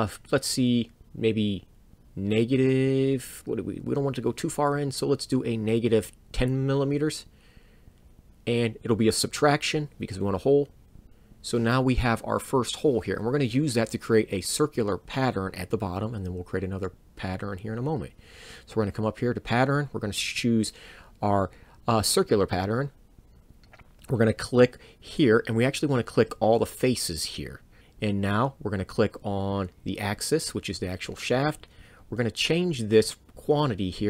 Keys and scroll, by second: 10.0 Return.